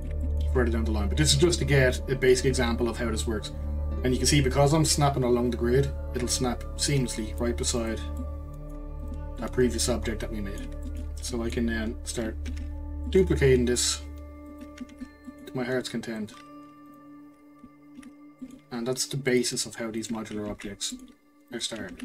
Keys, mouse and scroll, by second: 1.5 click, 7.8 click, 8.2-9.0 middle drag, 9.0 click, 9.4-12.5 middle drag, 12.5 shift+d, 14.9 shift+d, 16.9 shift+click, 18.0 shift+d, 20.0 click, 20.5 shift+d, 21.9 shift+d.